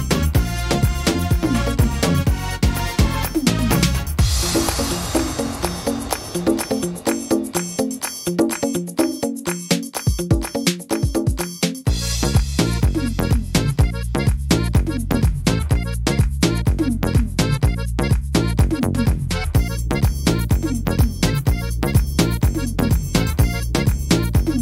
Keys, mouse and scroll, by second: 0.2 shift+middle click, 1.2 middle click, 1.7-2.1 scroll down 7, 2.3 middle click, 2.6 scroll down 1, 3.1 shift+middle click, 3.5 scroll up 2, 3.9 middle click, 4.4 shift+middle click, 5.0 scroll up 2, 5.8 right click, 6.9 l, 7.4 l, 21.3 click, 21.3 middle click, 21.6 scroll down 2, 22.2 right click, 22.9 l, 23.7 click.